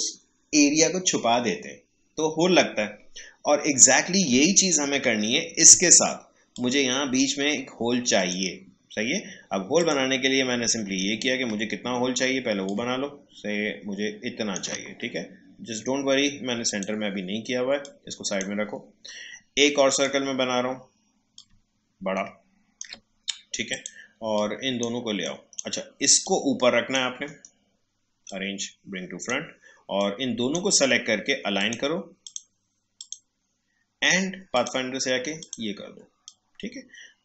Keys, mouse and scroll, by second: 3.7 click, 4.9 Delete, 5.5-8.1 drag, 10.9 alt+scroll up 1, 12.6-14.9 drag, 14.9 alt+scroll down 1, 16.7-27.2 drag, 27.2 right click, 28.2-37.2 drag.